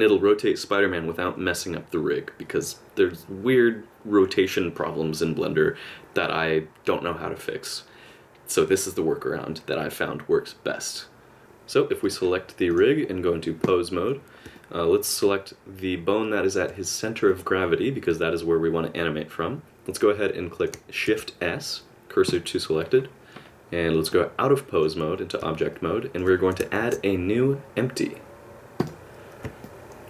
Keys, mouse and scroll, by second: 11.4 click, 12.0 click, 12.7 click, 14.6 middle click, 17.3 click, 21.1 shift+s, 24.1 click, 25.7 middle click, 26.8 shift+a, 29.6 middle click.